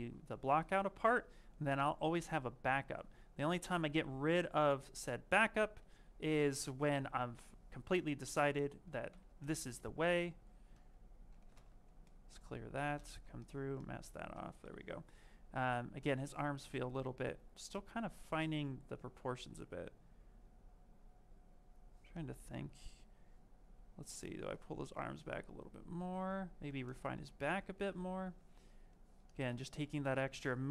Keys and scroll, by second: 8.9 ctrl+shift+a.